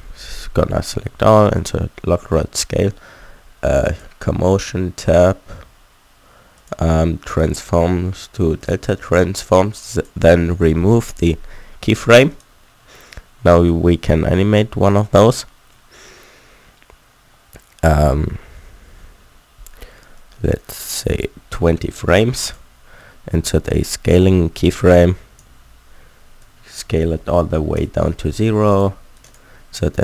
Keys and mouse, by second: 3.8-10.0 drag, 11.1 click, 12.3-17.9 drag, 17.9-20.1 middle drag, 22.4 click.